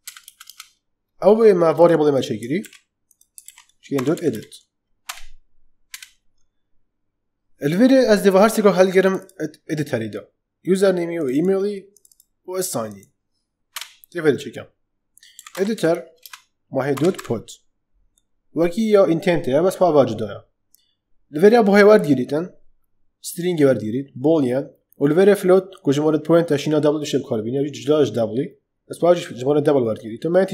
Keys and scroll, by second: 0.0-0.1 typing, 2.5 ctrl+c, 3.4 ctrl+v, 3.6-4.7 typing, 5.0 Return, 13.6 Return, 15.0-17.6 typing, 16.1 Return.